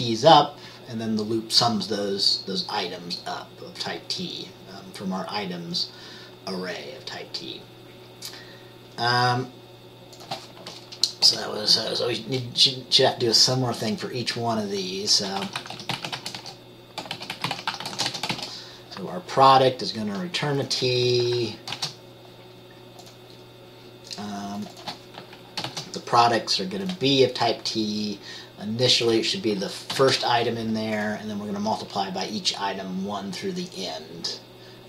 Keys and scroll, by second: 11.4 Return, 15.4-18.5 typing, 21.9 typing, 25.8 t, 30.1 t.